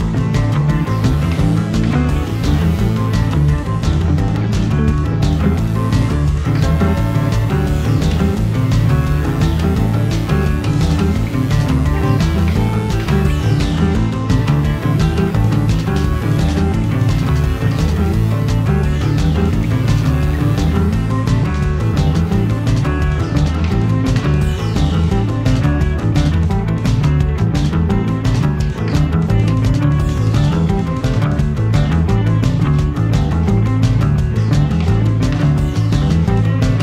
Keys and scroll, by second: 3.4 Delete, 15.2 Escape, 18.9 Escape, 20.0 d, 22.5 0, 22.6 ., 22.9 4, 23.4 Return, 31.9 0, 32.0 ., 33.0 7, 33.5 Return, 35.5 Escape.